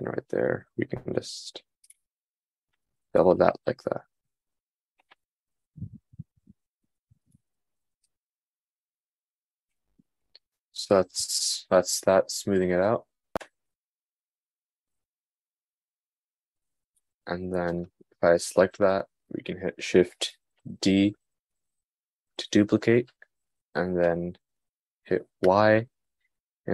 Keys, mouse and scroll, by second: 3.4 Tab, 17.5 click, 22.8 shift+d.